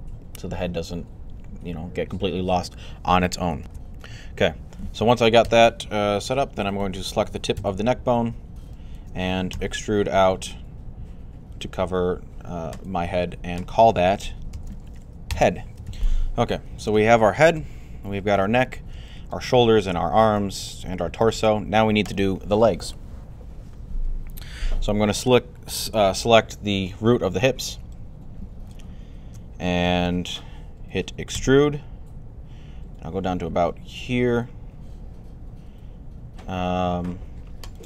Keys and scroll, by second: 5.3 1, 9.1-9.9 typing, 14.1-15.3 typing, 31.2 e.